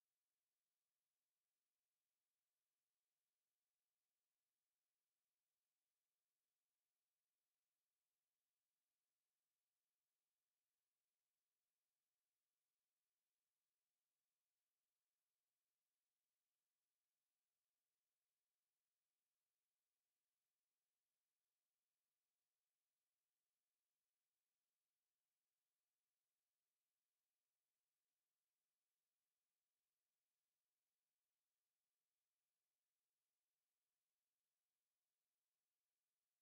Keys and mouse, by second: 0.6 alt+click, 1.4 alt+click, 2.0 alt+click, 3.2 alt+click, 4.0 click, 4.3 alt+click, 5.0 alt+middle click, 5.4 alt+click, 6.0 alt+right click, 6.4 alt+click, 7.0 alt+click, 7.3 right click, 8.1 click, 11.2 alt+click, 11.6 right click, 12.4 alt+click, 13.1 click, 15.8 alt+click, 16.5 alt+right click, 16.9 alt+click, 18.3 click, 18.7 alt+click, 19.1 right click, 20.1 alt+click, 20.5 right click, 21.3 click, 24.0 alt+click, 25.8 alt+click, 27.7 alt+click, 28.2 alt+click, 29.4 alt+click, 29.9 alt+right click, 30.5 alt+click, 35.0 alt+click, 35.8 alt+click, 36.2 right click.